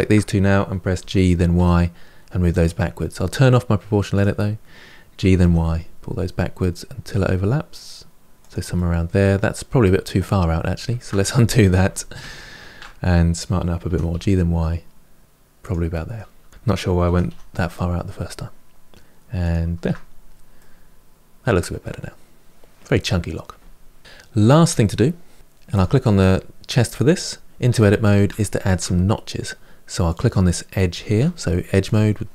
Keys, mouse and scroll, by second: 0.8 g, 3.9 click, 5.0 g, 8.5-10.7 middle drag, 10.7 ctrl+z, 11.0 middle click, 11.7 ctrl+z, 12.0 ctrl+z, 13.7 g, 15.7 middle click, 16.3 click, 16.9 g, 19.6 Tab, 19.9-20.4 scroll down 5, 20.4-23.4 middle drag, 24.0-25.3 shift+middle drag, 25.5 click, 27.5 Tab, 28.2 shift+middle click, 28.9-29.3 scroll up 3, 29.9 click, 31.0 2, 31.7 click.